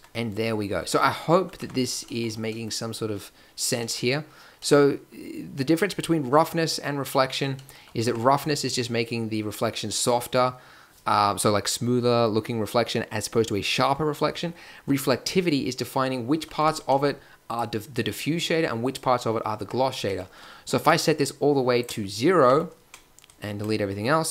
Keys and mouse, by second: 0.0 Tab, 1.6 Tab, 8.0 Tab, 16.6 Tab, 17.5-18.8 drag, 19.6 Tab, 22.3 middle click.